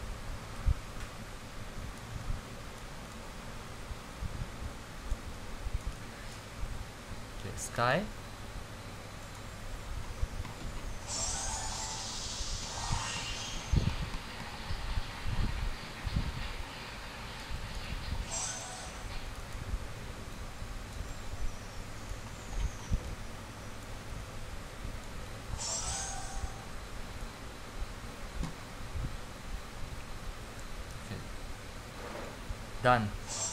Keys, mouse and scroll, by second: 1.2-6.0 typing, 5.1 click, 5.9 click, 6.5-9.9 drag, 9.9-10.3 scroll down 10, 10.7 scroll up 10, 11.3-12.0 scroll, 12.0 click, 12.6 scroll down 10, 12.8 scroll up 17, 15.7-16.2 scroll, 17.5 click, 18.0-19.0 typing, 19.4 click, 20.4 c, 21.1-22.0 x, 22.4 middle click, 22.9 scroll down 10, 23.8-27.3 typing, 27.3 click.